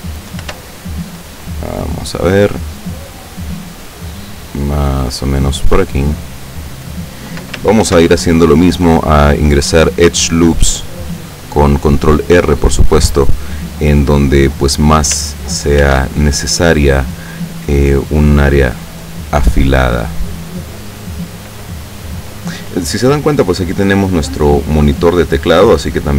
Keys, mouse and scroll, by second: 0.6 ctrl+r, 2.4 click, 6.6 click, 8.0 ctrl+r, 10.2 click, 13.2 click, 15.9 ctrl+r, 17.3 click, 20.3 click, 23.9 click, 24.7 click.